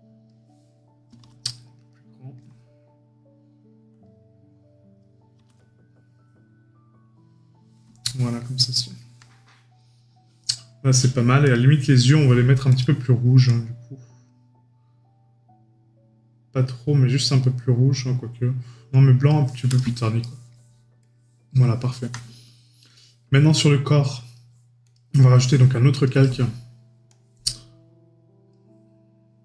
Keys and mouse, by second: 1.5 right click, 8.0 right click, 12.0 right click, 20.2 right click.